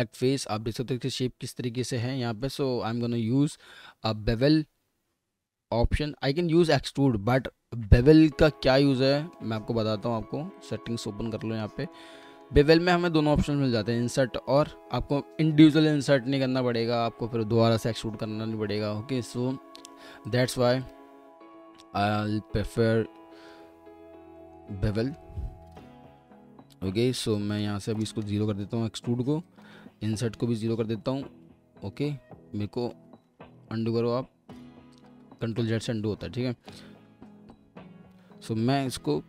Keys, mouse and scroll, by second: 1.8 alt+middle click, 8.6 alt+middle click, 11.6 alt+middle click, 21.8 alt+middle click, 24.4 middle click, 28.0 typing, 28.2 Return, 30.1 0, 30.6 Return, 33.4 ctrl+z.